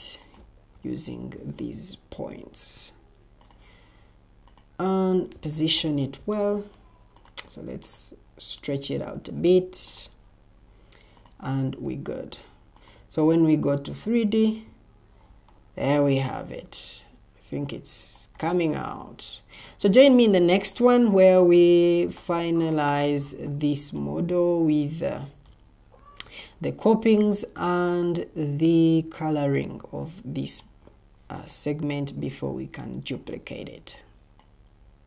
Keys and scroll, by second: 5.2 Escape.